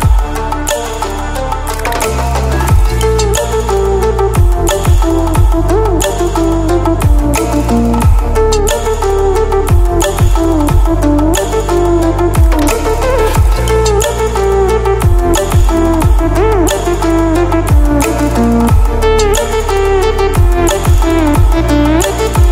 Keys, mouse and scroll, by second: 8.4 ctrl+w, 13.6 click, 19.1 ctrl+w, 19.1 Delete, 21.6 click.